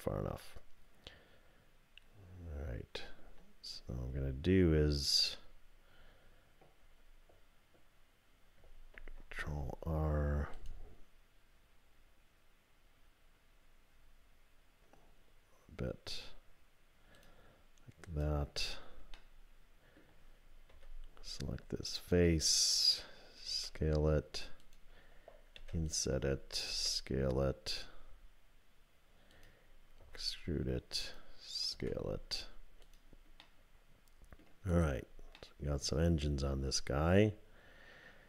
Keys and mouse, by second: 2.4 click, 2.4 right click, 9.0 ctrl+r, 18.0 click, 19.2 click, 20.7 3, 23.5 s, 25.6 i, 26.7 s, 30.0 e, 31.7 s, 33.5-34.5 drag, 34.7 click, 35.4-38.2 drag.